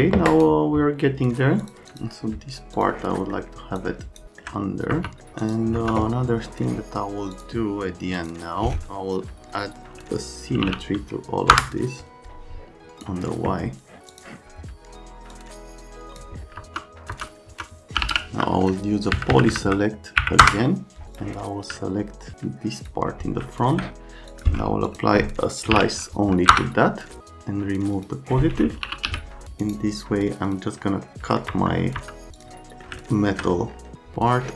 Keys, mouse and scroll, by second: 0.3 right click, 1.6 click, 1.9 click, 2.7 click, 3.2 middle click, 3.8 click, 4.2 alt+middle click, 4.9 F3, 5.2 middle click, 5.4 click, 5.7 F3, 6.5 right click, 7.3 click, 8.1 click, 10.3-11.1 typing, 11.5 Return, 13.0 click, 14.1 click, 15.3 click, 16.6 F3, 17.1 F3, 17.5 F3, 17.7-18.6 typing, 19.1 Down, 19.3 Down, 19.5 Down, 19.7 Down, 20.2 Up, 20.4 Return, 21.1 click, 21.8 alt+middle click, 22.4 click, 23.5 alt+middle click, 24.3 click, 24.9 click, 25.4-26.2 typing, 26.5 Return, 28.0 click, 28.6-29.5 typing, 28.7 right click, 29.6 scroll, 30.5 click, 31.0 right click, 31.5 F3, 32.0 F3, 32.4 middle click, 32.7 right click, 33.0 alt+right click.